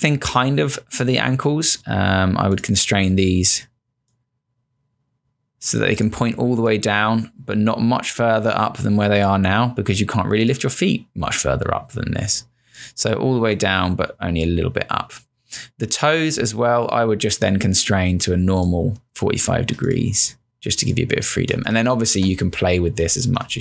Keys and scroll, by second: 21.6 space, 23.5 space.